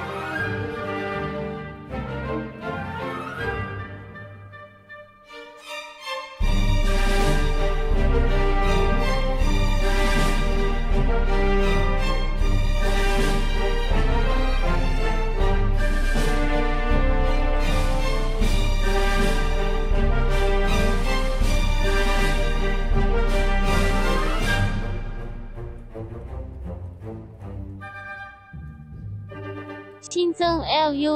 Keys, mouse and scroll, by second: 14.0 click, 16.0 middle click, 17.7-20.4 scroll down 1, 22.2 middle click, 23.9 scroll up 1, 25.5-27.1 scroll down 1, 27.1 middle click, 27.7-29.6 scroll down 1, 29.6 click.